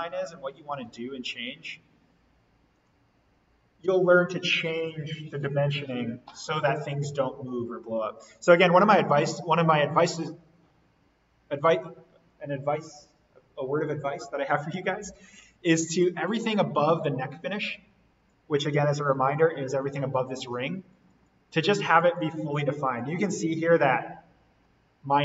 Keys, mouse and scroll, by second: 8.3 Escape, 8.7 scroll up 1, 9.5-10.4 scroll down 1, 10.4 scroll down 1, 18.9-19.4 scroll down 1, 20.8-21.2 scroll up 1, 23.2 Escape, 24.4 scroll down 1, 24.7-25.2 scroll up 1.